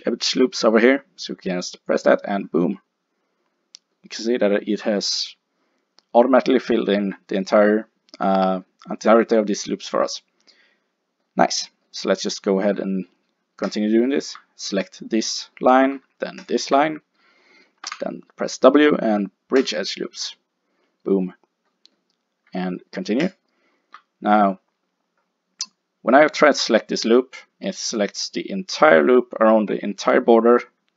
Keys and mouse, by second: 13.7 click, 15.4-16.5 middle drag, 16.5 click, 17.9 w, 23.3-25.1 drag, 25.1-28.8 middle drag.